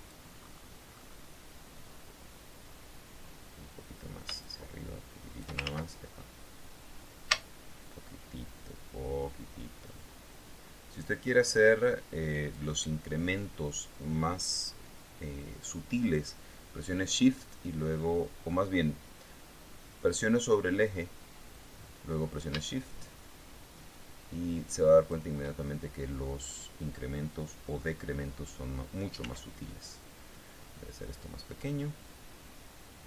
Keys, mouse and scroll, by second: 0.8-1.6 scroll up 2, 4.8-6.0 shift+drag, 6.0 ctrl+shift+z, 7.3-13.1 drag, 21.9-25.6 drag, 29.6 s.